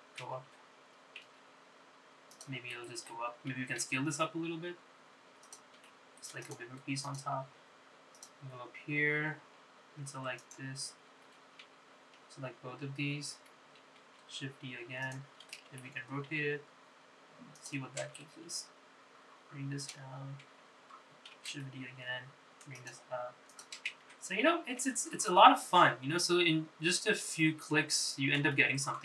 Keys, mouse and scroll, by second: 5.0 s, 6.9 s, 8.2 click, 9.3 click, 11.5 shift+click, 13.3 l, 13.8 l, 15.1 shift+d, 16.8 r, 19.4 g, 22.7 shift+d, 24.6 click, 25.3 Tab, 25.6 scroll down 2, 26.0 Tab, 26.2-29.0 middle drag.